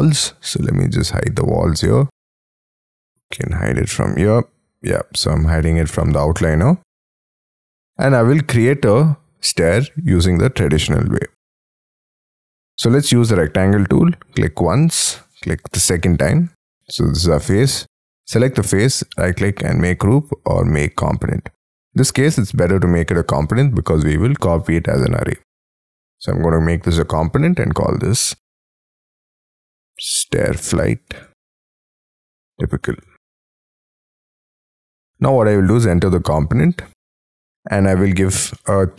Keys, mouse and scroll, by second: 0.3-1.2 scroll up 2, 1.2-2.2 scroll down 1, 6.0 middle click, 7.5-8.2 scroll up 10, 8.2 middle click, 11.5 scroll up 4, 12.0 scroll down 4, 12.5 scroll up 3, 13.0 r, 13.4 scroll up 3, 14.5 scroll down 4, 16.5 space, 16.9 double click, 19.1 right click, 28.8-33.6 typing, 34.6 middle click, 35.2-35.5 scroll up 4, 35.8 double click, 37.3 p, 38.5 middle click.